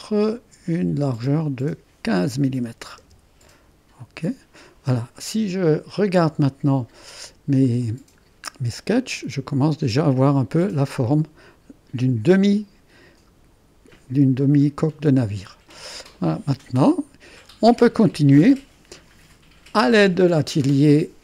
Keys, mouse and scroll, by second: 1.5-2.8 drag, 2.6-3.5 typing, 4.0-5.1 drag, 6.2-8.2 drag, 8.0 typing, 8.3 click, 9.0 click, 11.4-12.4 drag, 14.4-16.0 drag, 17.4-18.3 scroll up 1.